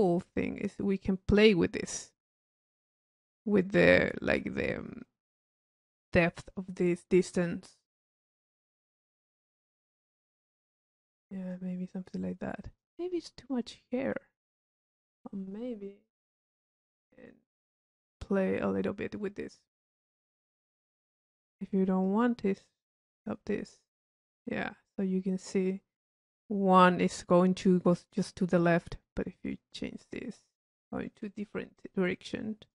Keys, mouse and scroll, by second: 4.1-5.5 drag, 6.4-8.0 drag, 8.6-11.9 drag, 12.7 click, 13.9 click, 14.8 click, 20.5 click, 22.2 click, 23.0 click, 24.3-32.7 drag.